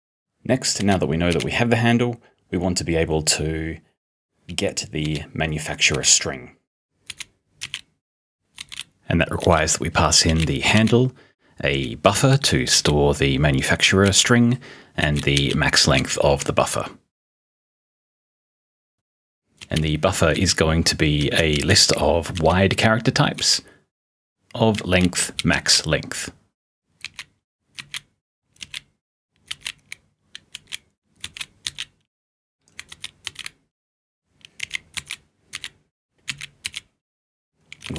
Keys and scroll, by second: 0.8 o, 1.2 r, 5.6-10.7 typing, 12.1-12.8 typing, 15.9 p, 19.6-25.6 typing, 27.0 p, 27.8 s, 29.3-37.9 typing.